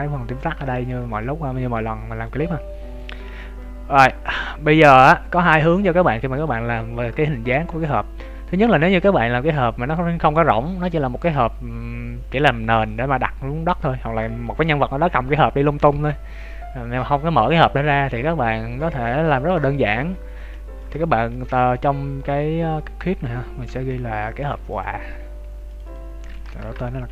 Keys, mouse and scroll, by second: 0.0 scroll up 2, 0.6 shift+middle click, 1.0 middle click, 2.4 KP_1, 2.9-3.4 scroll up 3, 3.2 KP_3, 5.6 right click, 6.7 Tab, 7.3 shift+middle click, 19.5-20.5 scroll up 1, 20.5 shift+middle click, 23.6 Tab, 24.6 click.